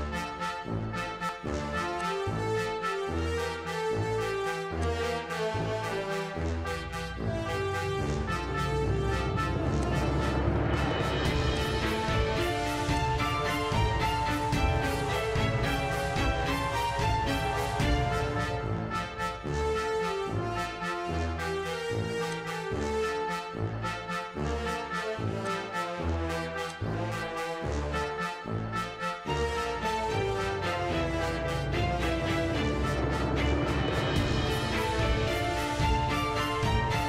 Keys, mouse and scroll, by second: 2.0 click, 6.0-6.4 scroll, 9.2 right click, 9.9 click, 11.6 click, 13.0 click, 17.9 s, 22.3 click, 25.4 click, 26.7 click, 29.3 Tab, 31.2 BackSpace, 31.4 BackSpace, 33.4 BackSpace, 34.6-35.1 typing, 36.3-37.0 typing.